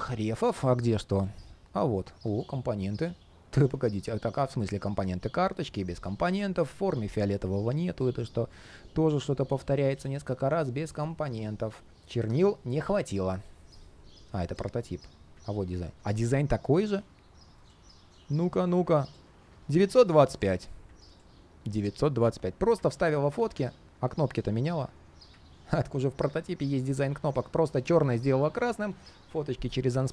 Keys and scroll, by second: 7.7 ctrl+shift+3, 8.5 ctrl+shift+3, 13.2 ctrl+shift+3.